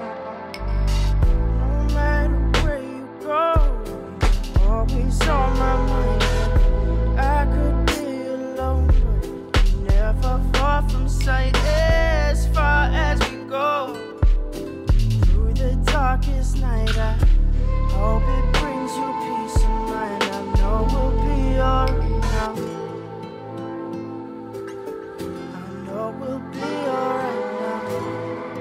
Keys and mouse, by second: 3.0 click, 3.6 g, 7.1 click, 8.0-10.4 drag, 10.5-11.9 drag, 12.3 click, 12.8-13.9 drag, 14.2 click, 14.6 click, 16.3 click, 16.5 click, 17.3 click, 17.5 middle click, 18.5 click, 20.2-21.3 drag, 21.5 middle click, 22.7 click, 23.1 click, 28.2 click.